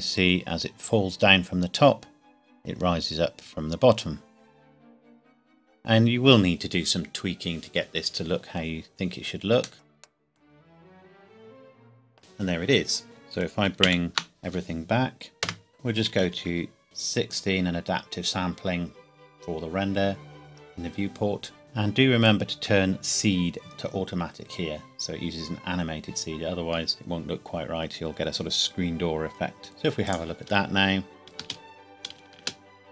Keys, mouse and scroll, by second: 9.3-9.7 scroll up 1, 9.7 middle click, 13.0 ctrl+s, 13.8 alt+h, 15.4 KP_0, 15.7 click, 16.1 KP_1, 16.2 KP_6, 16.5 KP_Enter, 17.3 click, 21.6 click, 23.6 click, 29.6 ctrl+s, 30.0 click, 31.4 space, 32.3 space, 32.8 middle click.